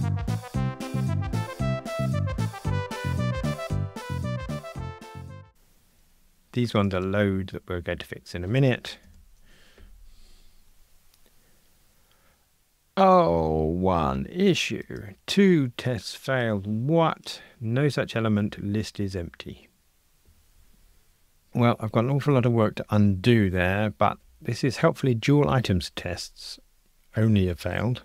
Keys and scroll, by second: 0.1 Return, 0.7 alt+shift+Left, 0.9 Tab, 1.1 ctrl+r, 1.4 alt+shift+Right, 1.6 Return, 1.7 F2, 1.8 alt+shift+Right, 2.1 ctrl+r, 2.3 alt+shift+Right, 2.6 Escape, 2.6 super+z, 2.9 Escape, 3.2 alt+shift+Right, 3.3 Escape, 3.9 ctrl+r, 4.6 Escape, 4.8 alt+shift+Left, 5.0 Escape, 9.0 ctrl+r.